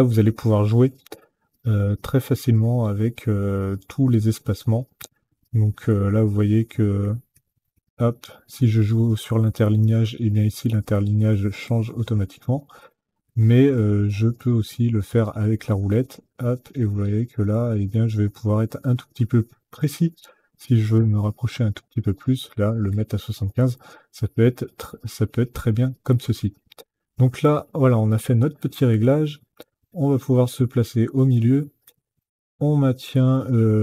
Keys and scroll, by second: 6.3 alt+Up, 7.0 alt+Down, 8.3 alt+Down, 8.6 alt+Up, 19.6 KP_5, 20.6 Tab.